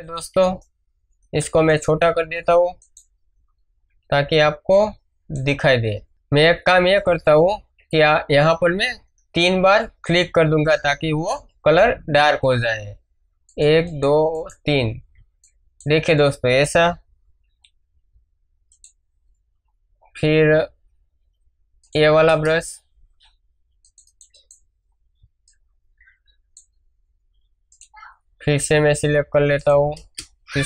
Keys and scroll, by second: 4.4 space, 7.6 ctrl+alt+z, 15.1 ctrl+space, 15.6 ctrl+space, 22.2 Return, 25.1 space, 30.0 Return.